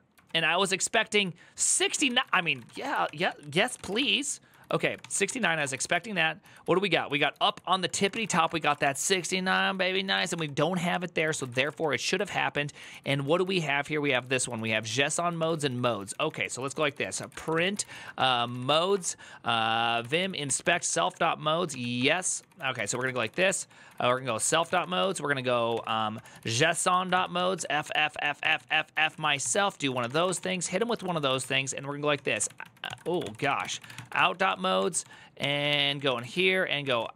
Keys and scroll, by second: 0.0 ctrl+d, 0.4 ctrl+d, 1.6-37.1 typing, 3.0 ctrl+s, 6.4 ctrl+u.